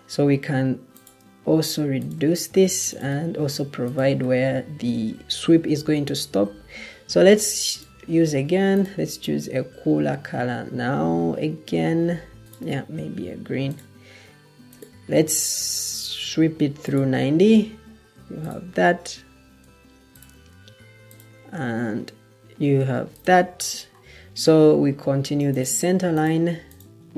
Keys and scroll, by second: 5.6 Escape, 19.5 Escape.